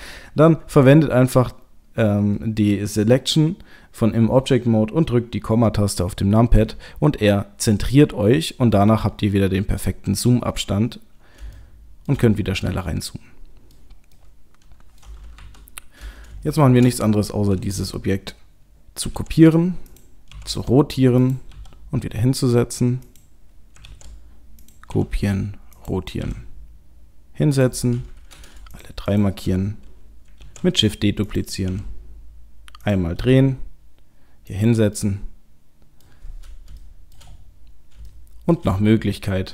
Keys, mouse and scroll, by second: 0.7 click, 6.6 KP_Decimal, 8.4-9.4 scroll down 11, 9.1-9.7 scroll up 10, 9.7 scroll down 1, 9.9-10.8 scroll down 4, 10.5-11.4 scroll up 2, 11.6 shift+middle click, 13.0 middle click, 13.7 scroll up 1, 14.1 middle click, 15.4 KP_7, 16.1-16.5 scroll down 4, 16.5 shift+middle click, 16.9-19.0 scroll up 2, 19.0 shift+d, 20.3 r, 21.5 g, 23.9 shift+d, 24.9 r, 26.2 g, 28.7 shift+click, 29.1 shift+click, 30.4 shift+d, 31.7 r, 33.2 g, 35.0 middle click, 36.4-36.8 scroll down 2, 36.8 shift+middle click, 37.3-38.0 scroll up 5, 38.1 shift+middle click.